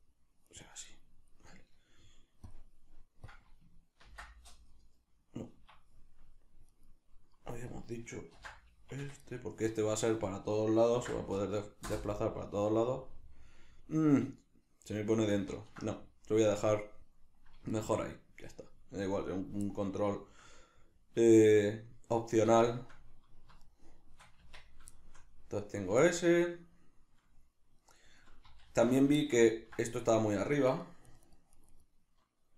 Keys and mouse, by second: 0.9 right click, 2.5 click, 3.3-6.7 drag, 5.7 Escape, 6.7 right click, 7.7-9.3 drag, 8.9 Escape, 9.3 right click, 10.3-13.1 drag, 11.9 Return, 13.1-16.0 middle drag, 15.4 ctrl+z, 17.7-24.4 shift+middle drag, 24.4 Tab, 25.0 shift+middle click, 28.7 alt+q, 29.5 ctrl+middle click, 30.0 right click, 30.7 right click, 31.1 right click, 31.3 right click, 31.6 right click, 31.7 right click.